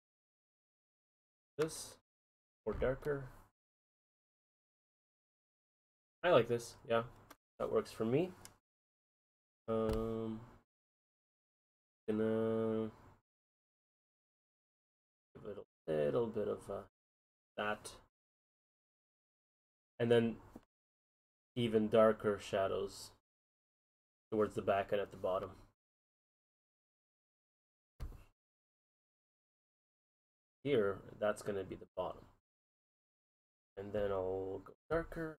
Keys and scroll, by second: 21.4 ctrl+z.